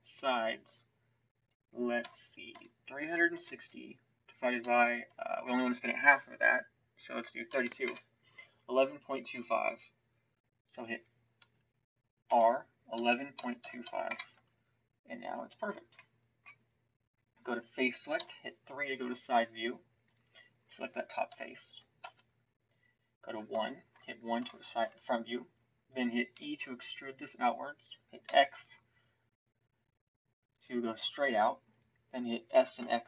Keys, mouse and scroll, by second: 11.3 Tab, 12.2 r, 14.3 Tab, 18.2 KP_3, 22.0 KP_1, 26.3 e, 32.5 s.